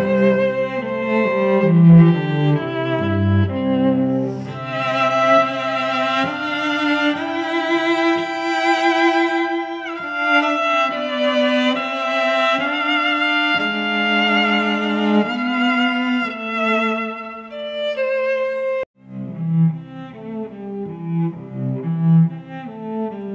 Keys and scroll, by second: 0.5 shift+Left, 0.7-4.2 typing, 4.3 ctrl+Return, 4.9 ctrl+t, 6.7 Return, 7.0 v, 7.3 shift+Down, 7.4 shift+Right, 8.0 t, 8.8 space, 9.3 ctrl+Return, 9.7 v, 10.4 Tab, 10.7 space, 13.7 ctrl+t, 15.9 Return, 17.4 space, 20.8 space, 21.8 t, 22.8 ..